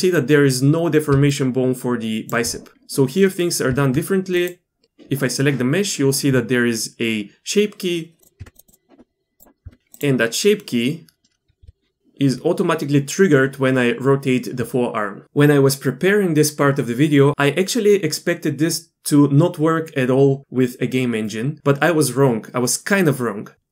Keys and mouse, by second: 1.1 d, 1.3-3.3 drag, 2.3 d, 3.3 d, 3.4 middle click, 3.7 Tab, 4.4 click, 8.2 Tab, 8.4 Tab, 9.6 Tab, 11.6 r.